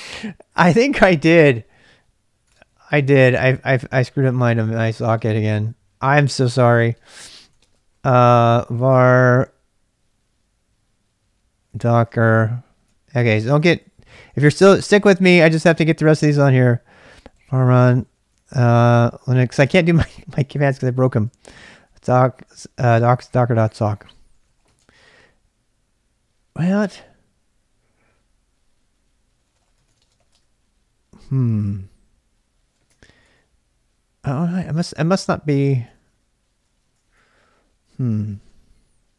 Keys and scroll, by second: 2.3-8.7 typing, 11.4-14.6 typing, 16.8-25.2 typing, 26.8 typing, 29.2-30.7 typing, 32.9 ctrl+[, 33.0 k, 33.2 k, 34.4-39.1 typing.